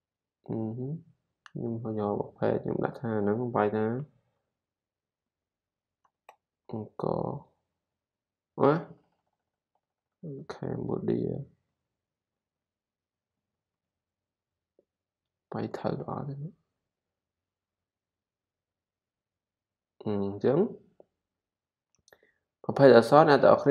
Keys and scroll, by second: 3.9-6.9 typing, 10.7-14.2 typing.